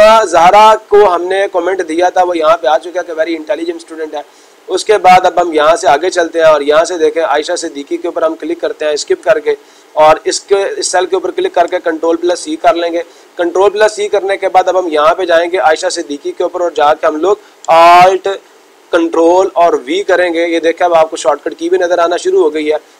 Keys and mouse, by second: 1.0-2.0 drag, 6.2-7.2 drag, 7.3-8.3 drag, 9.2 Escape, 11.0 click, 12.1 ctrl+c, 15.2-16.2 drag, 16.4-17.4 drag.